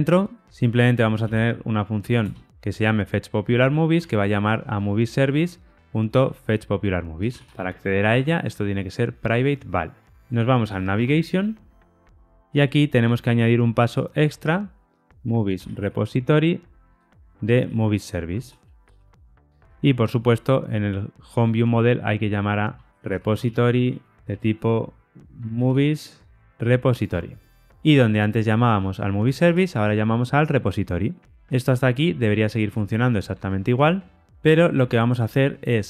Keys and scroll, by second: 2.2 Return, 3.8 Tab, 16.2 Return, 19.7 super+b, 27.1 Tab, 30.0 Return, 31.6 shift+F10.